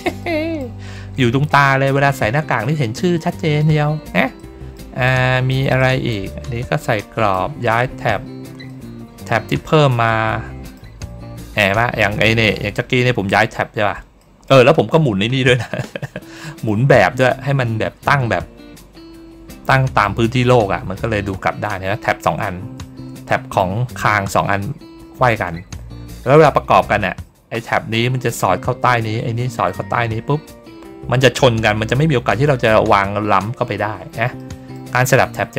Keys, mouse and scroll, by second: 0.1 middle click, 4.3 middle click, 4.9 middle click, 5.7 middle click, 6.9 middle click, 8.6 middle click, 9.5-10.6 middle drag, 14.1 middle click, 14.7 ctrl+scroll down 1, 16.2 middle click, 17.4 ctrl+scroll down 1, 19.6 middle click, 20.6 ctrl+scroll down 1, 22.7 ctrl+middle click, 23.0 middle click, 34.3 middle click, 35.2 middle click.